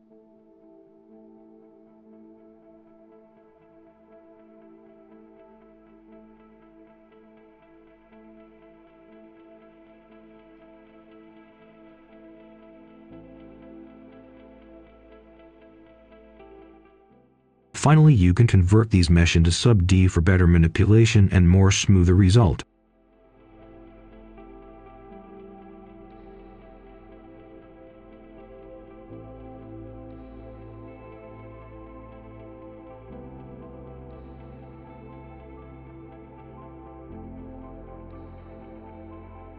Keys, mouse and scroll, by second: 1.5 ctrl+right click, 2.7 click, 3.7 ctrl+right click, 4.8 click, 5.8 3, 6.8 click, 8.1 ctrl+right click, 9.4 ctrl+right click, 10.0 click, 11.3 right click, 12.3 scroll down 1, 12.5 scroll up 1, 12.8-17.0 right drag, 17.4 scroll down 1, 17.7 right click, 18.1 scroll down 1, 18.3 scroll up 1, 18.5 click, 19.2-21.6 typing, 22.8-24.6 drag, 25.2 middle click, 25.8 click, 26.7 ctrl+right click, 28.2-28.5 scroll down 2, 29.1 scroll up 1, 29.3 right click, 30.2 scroll up 1, 30.5 right click, 31.4 scroll down 1, 31.8 scroll up 1, 32.0 right click, 32.9 scroll up 1, 33.1 right click, 34.5 click, 35.6 ctrl+scroll up 1, 36.1 ctrl+scroll down 1, 37.0 ctrl+scroll up 1, 37.6 click, 38.1-38.4 ctrl+scroll up 1, 38.4 click, 39.2 ctrl+shift+h.